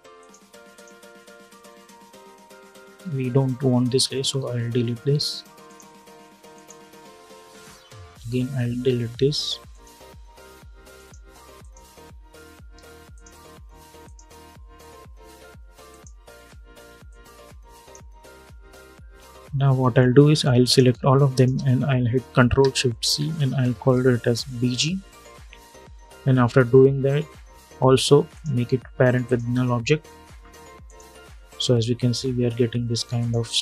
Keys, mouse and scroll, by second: 2.3-4.2 scroll down 1, 5.4 click, 9.4 click, 11.8-12.5 scroll up 1, 12.8 shift+click, 13.7 click, 14.3 scroll down 1, 15.6-19.4 drag, 19.4 scroll down 1, 20.3 click, 21.0 shift+click, 22.7 ctrl+shift+c, 23.8-24.7 typing, 25.0 Return, 28.0 click.